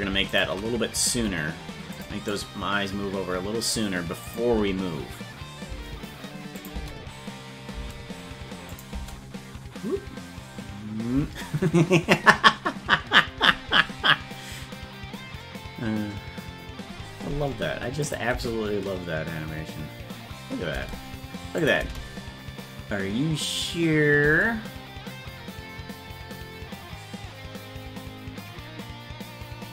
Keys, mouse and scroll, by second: 0.3 shift+right click, 1.1 g, 2.3-3.7 drag, 4.3 click, 4.5 space, 6.6 click, 6.6 space, 6.7 space, 8.7 click, 8.7 space, 12.8 space, 18.1 click, 18.3 space, 21.6 click, 21.6 space, 21.8 space, 25.7 space.